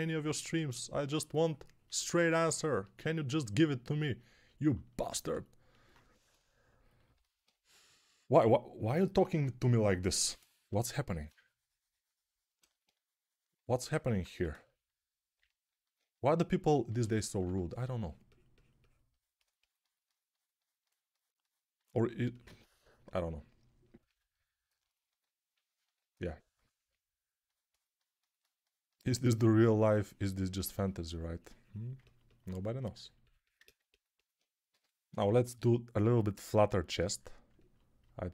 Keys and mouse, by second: 5.9 1, 10.5 3, 14.1 1, 17.3 2, 34.6-35.4 typing.